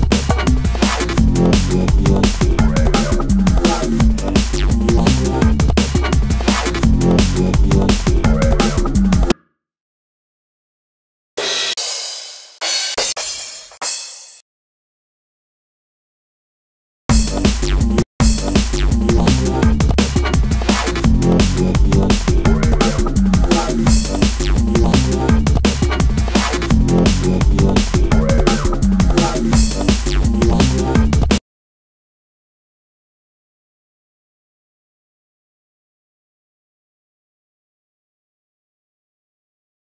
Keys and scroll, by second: 3.2 super+t, 4.6 c, 5.3 h, 7.7 space, 10.1 Up, 18.2 shift+super+t, 19.1 shift+super+r, 20.1-21.7 typing, 23.1 super+r, 23.6 shift+super+r, 23.6 shift+super+t, 23.8 shift+o, 26.4-27.3 typing, 29.7 space, 33.7-34.7 typing.